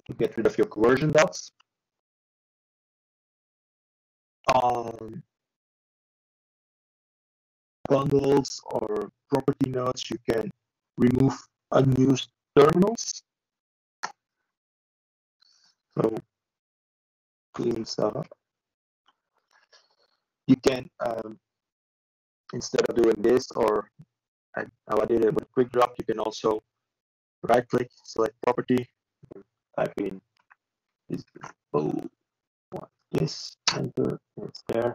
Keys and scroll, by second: 16.6 ctrl+z.